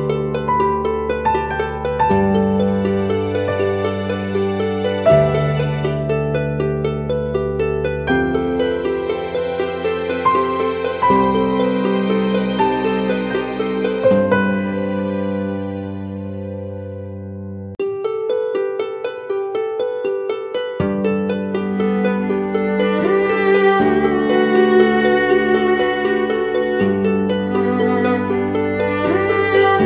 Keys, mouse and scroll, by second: 8.9 ctrl+t, 10.2 alt+shift+click, 14.8 alt+shift+click, 15.9 alt+shift+click, 16.7 Down, 17.7 Down, 18.4 Up, 20.0 ctrl+t, 20.7 alt+shift+click, 22.4 alt+shift+click, 24.8-25.6 scroll down 1.